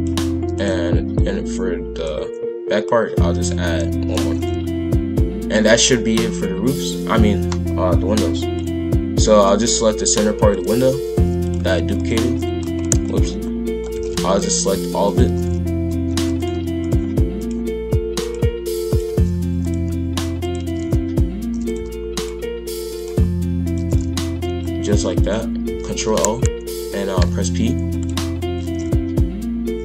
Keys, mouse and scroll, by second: 0.4 shift+d, 1.2 click, 2.8 click, 4.2 shift+f, 9.4 click, 10.5 shift+click, 10.7 shift+f, 11.9 shift+click, 12.6 ctrl+z, 13.0 shift+click, 13.8 shift+click, 13.9 shift+f, 14.1 d, 15.0 shift+click, 15.2 shift+f, 16.8 shift+click, 17.4 shift+click, 18.2 shift+click, 18.9 shift+click, 19.1 shift+f, 20.4 shift+click, 20.6 shift+f, 22.2 shift+click, 22.9 shift+click, 23.6 shift+click, 23.7 shift+f, 25.9 ctrl+l, 27.2 p, 28.7 shift+f.